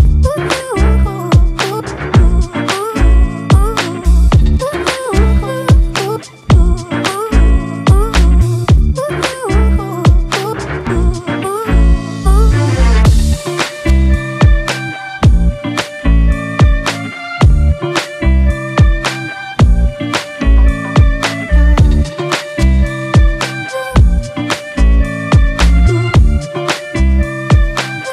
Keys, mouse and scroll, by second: 8.2-10.4 typing, 16.4 [, 25.2-28.1 scroll down 1.